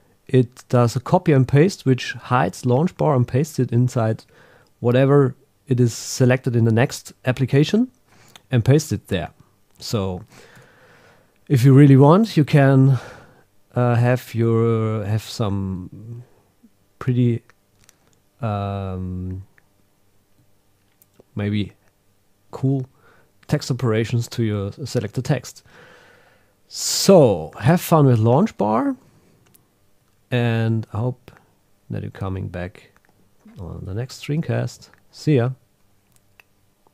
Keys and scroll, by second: 10.5 super+s, 29.0 super+w, 34.1 super+n, 34.4 super+m.